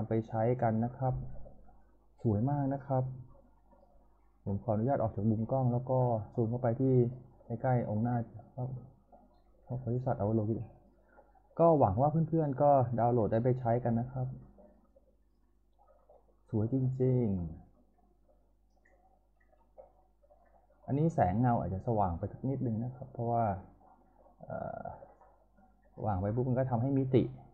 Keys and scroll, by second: 4.9 p.